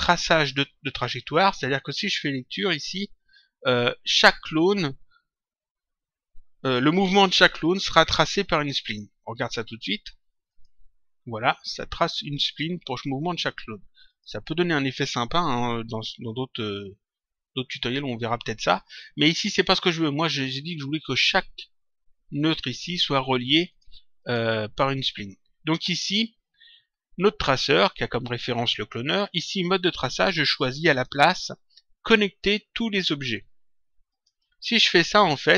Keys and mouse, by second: 10.4 click, 14.0 click, 23.6 click, 30.9 click, 34.0 click.